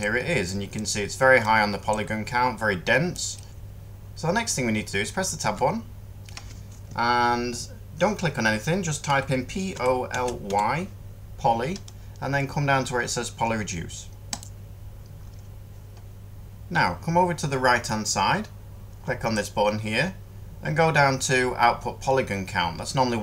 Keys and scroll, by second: 3.5 Tab, 5.3 Tab, 9.0-10.4 typing.